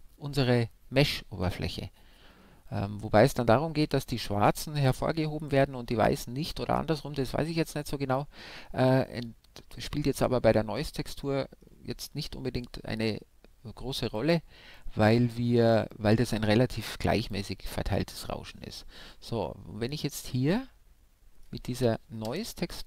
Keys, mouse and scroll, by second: 7.6 middle click, 8.4-9.1 scroll down 1, 9.1-13.1 middle drag, 15.9-17.6 drag, 19.0 middle click, 20.6-22.3 middle drag, 22.3 KP_0.